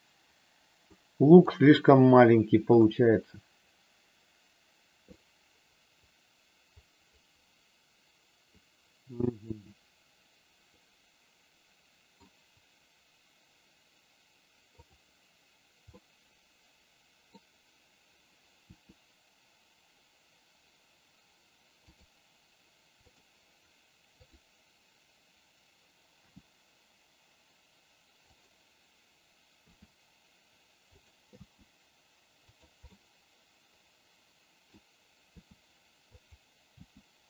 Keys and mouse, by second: 0.9 middle click, 2.6 KP_3, 5.1-12.2 middle drag, 14.7 click, 15.9-17.2 middle drag, 18.6 r, 23.0 click, 24.1 click, 26.2 g, 29.6 r, 31.2 g, 32.7-34.7 middle drag, 35.4 r, 36.1 click, 36.7 g.